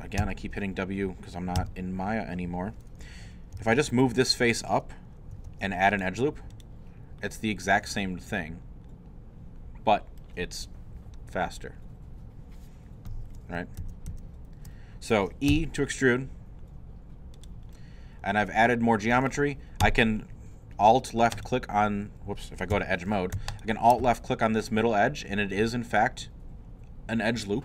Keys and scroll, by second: 1.6 w, 3.3-4.1 typing, 5.4 ctrl+r, 13.8 ctrl+z, 15.7 e, 22.7 alt+2, 23.2 2.